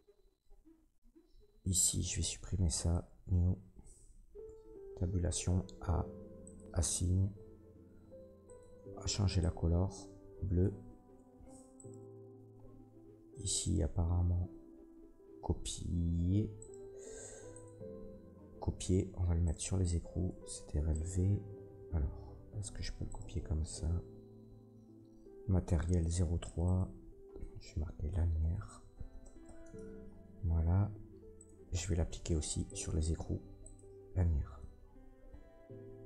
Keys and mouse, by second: 4.4 Tab, 5.0 a, 8.6-11.8 middle drag, 11.2 Tab, 11.9-13.6 middle drag, 13.6 click, 13.7-16.6 middle drag, 15.1 ctrl+c, 16.6-19.5 drag, 17.5 middle click, 17.5 right click, 18.4 ctrl+c, 19.5 middle click, 20.3 ctrl+v, 20.9-23.2 drag, 25.8 click, 26.4 click, 26.7-31.3 drag, 31.3 middle click, 31.4-36.0 drag.